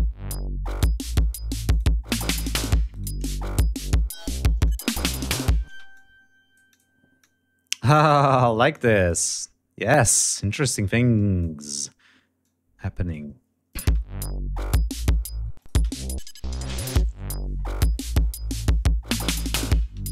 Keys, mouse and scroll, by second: 1.4 click, 1.8 click, 2.6 shift+right click, 3.2 shift+click, 4.4 click, 5.4 space, 5.7 click, 6.9 click, 8.5 click, 9.9-11.6 drag, 12.1 click, 13.4 click, 13.6 space, 15.2 space, 15.3 click, 19.7 scroll down 3.